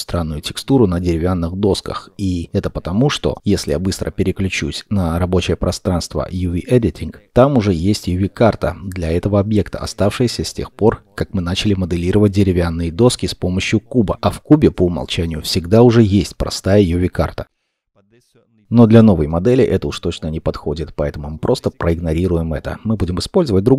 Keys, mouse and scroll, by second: 2.9-4.9 scroll down 1, 6.2-6.9 scroll down 1, 6.9 middle click.